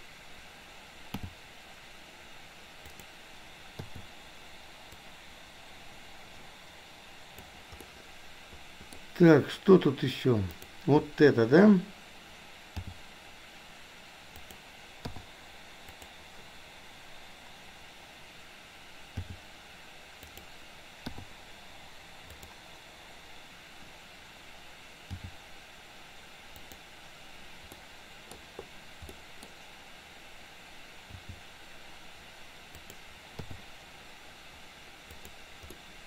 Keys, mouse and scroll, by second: 1.2 g, 3.9 i, 5.1-7.6 drag, 7.9-9.0 middle drag, 10.6 click, 12.9 g, 15.1 i, 16.0 click, 19.2 g, 21.2 i, 22.5 click, 25.1 g, 27.9-28.5 middle drag, 29.1-29.5 middle drag, 29.5-30.1 scroll down 1, 31.1 g, 33.5 i, 35.2 click, 35.7-36.0 middle drag.